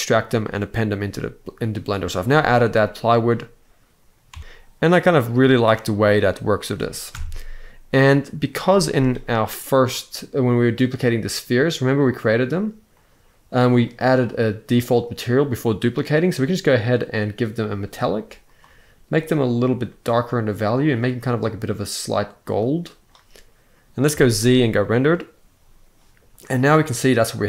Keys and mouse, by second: 2.0 z, 4.0 Tab, 6.7 KP_0, 8.3 z, 13.6-16.2 drag, 17.2 click, 23.8 z, 26.8-27.4 drag.